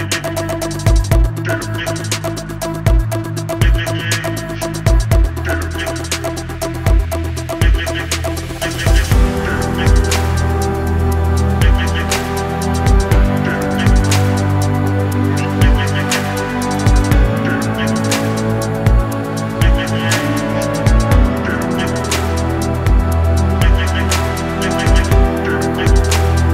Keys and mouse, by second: 1.2 r, 1.8 g, 3.1 s, 4.2 shift+click, 4.4 e, 5.2 click, 6.0 s, 10.5 a, 10.8 b, 11.7 click, 13.3 shift+click, 13.6 a, 14.6 b, 15.6-18.4 drag, 18.4 e, 19.3 click, 19.8 g, 20.8 shift+click, 22.0-24.6 typing, 25.8-26.5 typing.